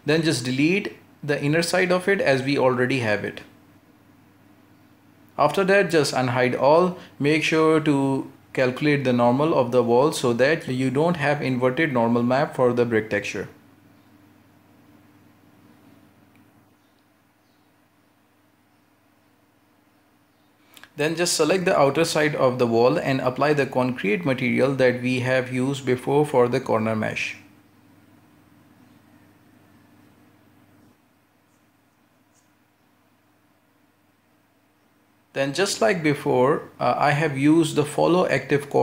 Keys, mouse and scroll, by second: 0.1 h, 0.6 scroll up 1, 0.9 shift+middle click, 1.3-1.8 scroll up 1, 1.8 right click, 2.2 alt+shift+right click, 2.9 x, 4.3 alt+h, 5.2 a, 6.9-7.3 scroll down 1, 7.3 a, 7.8-8.3 middle drag, 8.3 a, 8.4 a, 8.8-9.8 middle drag, 9.8 right click, 10.0 ;, 10.5 l, 11.6 ctrl+KP_Add, 13.3 shift+n, 14.8-15.5 scroll up 1, 15.5 ctrl+z, 16.7 shift+n, 17.6 scroll down 3, 18.0 Tab, 18.6-20.6 middle drag, 20.6-21.0 scroll up 1, 21.0 Tab, 21.5 right click, 22.0 alt+shift+right click, 23.0-23.3 scroll down 2, 23.3-25.6 middle drag, 25.6 ctrl+space, 27.1 click, 28.6-29.4 drag, 29.4-31.4 scroll down 1, 31.4-33.7 drag, 33.9 scroll up 4, 34.2 middle click, 34.8-35.1 scroll down 2, 35.1-36.1 middle drag, 36.1 right click, 36.5 u.